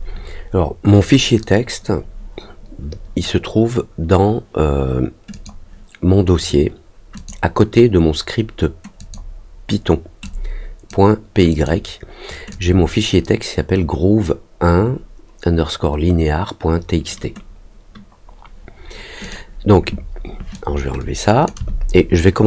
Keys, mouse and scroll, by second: 5.3 click, 6.3 click, 7.1 click, 8.9 click, 10.2 click, 11.4 click, 12.4 click, 19.2 click, 20.5 click.